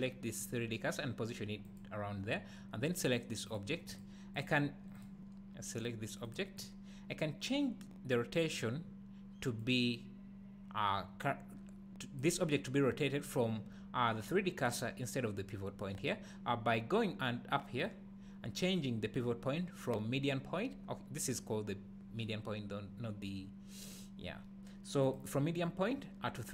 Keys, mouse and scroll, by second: 1.6 click, 3.4 click, 4.3 click, 5.0 click, 5.8 click, 6.2 click, 6.6 click, 8.5 click, 9.6-26.5 drag.